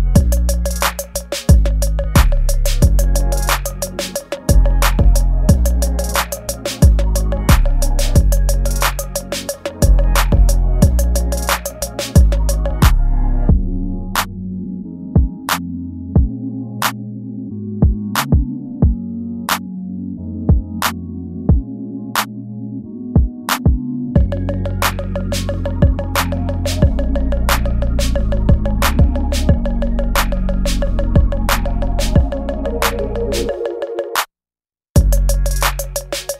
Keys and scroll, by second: 4.5 ctrl+s, 5.2 space, 5.5 space, 6.9 ctrl+z, 8.1 ctrl+z, 11.1 ctrl+z, 11.6 ctrl+z, 13.2 space, 13.8 ctrl+z, 15.1 ctrl+z, 19.8 space, 20.6 space, 22.7 ctrl+z, 24.6 ctrl+z, 27.1 space.